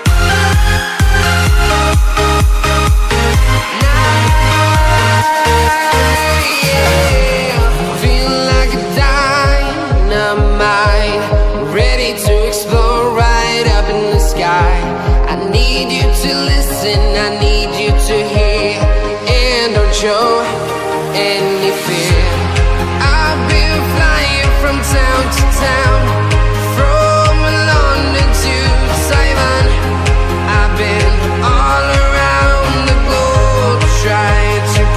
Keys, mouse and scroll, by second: 0.0-0.5 typing, 2.0 click, 6.3 click, 7.4 Tab, 8.1 click, 9.7 click, 9.8 Return, 10.2 click, 10.3 Return, 10.8 click, 12.0-13.4 scroll up 1, 13.4 click, 16.6 click, 25.0 click, 25.2-25.9 typing, 26.2-27.3 scroll up 1, 27.3 click, 27.8 click, 29.6 Return, 30.7 click, 32.5-33.3 scroll down 1, 33.3 click.